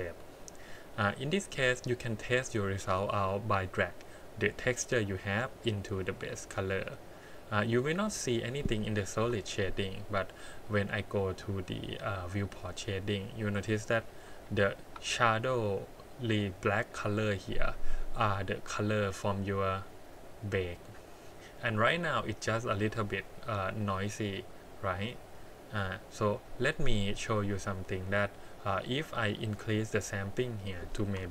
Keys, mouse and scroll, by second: 4.5-6.3 drag, 7.6-8.0 middle drag, 9.2 KP_1, 12.3 click, 13.5-14.2 scroll up 5, 14.4 shift+middle click, 21.8-22.6 scroll up 3, 22.6 middle click, 24.7-25.2 scroll down 5, 25.4 middle click, 25.9-27.5 scroll up 2, 27.5 scroll up 3, 28.6 click, 29.4 click, 30.6-31.3 drag.